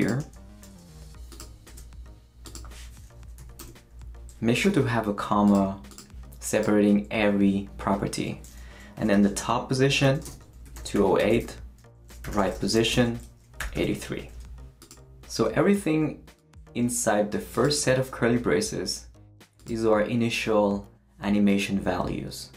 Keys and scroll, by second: 0.6 shift+super+c, 1.2 super+c, 1.7 super+v, 3.4 ,, 3.6 Return, 4.6 Escape, 8.9-14.2 typing.